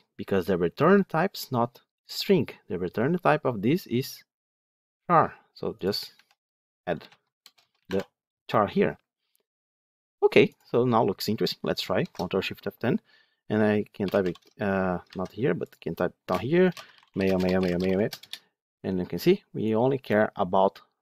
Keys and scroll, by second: 11.9 ctrl+shift+F10, 14.9 ctrl+z.